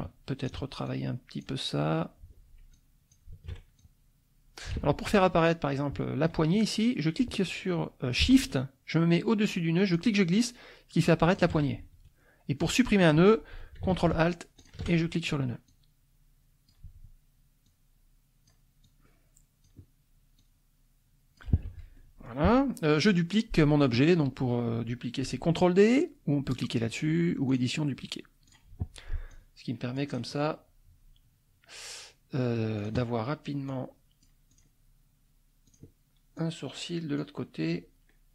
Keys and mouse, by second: 0.4 ctrl+click, 0.8 ctrl+click, 2.7 click, 3.8-4.9 ctrl+drag, 4.7 ctrl+z, 5.4-6.4 drag, 9.9-11.5 shift+drag, 14.6 ctrl+alt+click, 15.7-16.8 drag, 17.6-18.7 drag, 18.8-19.8 drag, 20.4-21.5 drag, 21.6 F1, 22.0 middle click, 27.5 click, 28.5 click, 29.3-30.3 drag, 32.8 click, 33.6 click, 34.5 click, 35.6 click, 36.3 click, 37.2-38.3 drag.